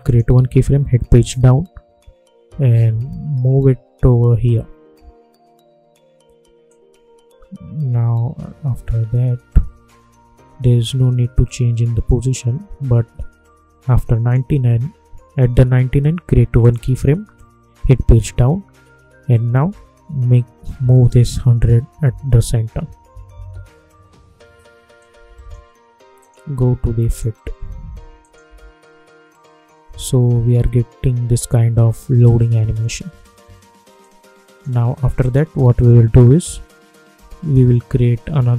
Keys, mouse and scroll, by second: 1.2 Page_Down, 2.4 Left, 6.1 Left, 6.6-16.5 drag, 18.1 Page_Down, 19.6 Left, 24.9 click, 28.4 space, 32.6 space, 33.9 click, 35.8 u.